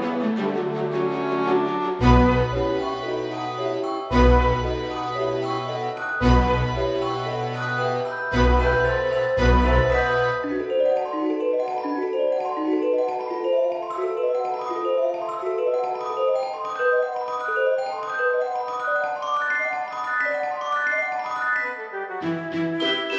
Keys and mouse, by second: 1.5 click, 2.2 shift+middle click, 2.6 s, 3.8 click, 4.0-6.1 typing, 4.8 click, 5.5 click, 6.2 click, 6.8 shift+middle click, 7.4 Tab, 8.2 ctrl+r, 8.9 click, 10.8 click, 12.0 alt+shift+click, 13.6 alt+e, 14.0 click, 15.9 click, 16.5 Tab, 16.7 right click, 17.0 click, 19.9 click, 20.6 KP_0, 20.7 KP_Decimal, 21.0 KP_0, 21.6 Return, 21.6 KP_Enter, 22.5 click.